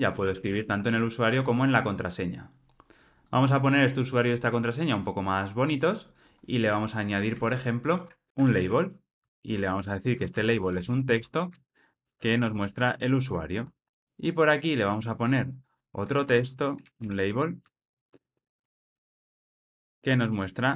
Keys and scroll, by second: 9.1 Return, 13.6 alt+super+l, 13.9 ctrl+alt+o, 17.6 Return.